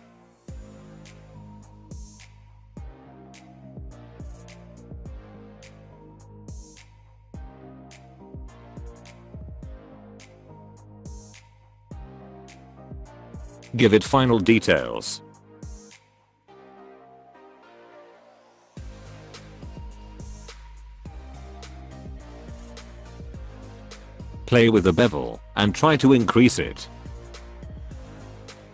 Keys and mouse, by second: 0.0-6.6 typing, 0.1 shift+middle click, 0.2 shift+middle click, 0.7 ctrl+z, 0.7 alt+middle click, 1.2 alt+middle click, 1.9 alt+middle click, 2.3 alt+middle click, 2.5 shift+middle click, 2.6 shift+middle click, 2.8 shift+middle click, 4.3 ctrl+z, 4.4 ctrl+z, 5.8 click, 6.7 click, 7.0 click, 7.3 middle click, 7.6-13.1 typing, 9.0 alt+click, 9.9 shift+click, 10.1 shift+click, 10.1 middle click, 11.0 middle click, 11.1 middle click, 11.2 alt+middle click, 11.6 alt+click, 13.2 middle click, 13.3 Tab, 13.3 alt+a, 13.5 alt+middle click, 13.9 middle drag, 14.3 alt+middle click, 14.9 Tab, 15.0 click, 15.2 g, 16.3 click, 16.5 g, 17.5 g, 18.3 Tab, 18.6 click, 18.7 drag, 19.0 alt+click, 19.4 shift+click, 19.7 middle click, 20.0 middle click, 20.2 alt+middle click, 20.4 middle click, 20.7 Tab, 20.8 Tab, 20.9 alt+a, 21.0 middle click, 21.1 middle drag, 21.5 alt+middle click, 21.7 shift+middle click, 21.9 Tab, 22.0 click, 22.1 g, 22.4 click, 22.4 g, 22.7 middle click, 22.8 Tab, 22.9 middle click, 23.4 middle click, 23.6 shift+middle click, 24.1 middle drag, 25.5-26.7 drag, 26.8-27.7 middle drag, 27.9 shift+middle click, 28.1 middle drag, 28.4 shift+middle click, 28.5 middle click.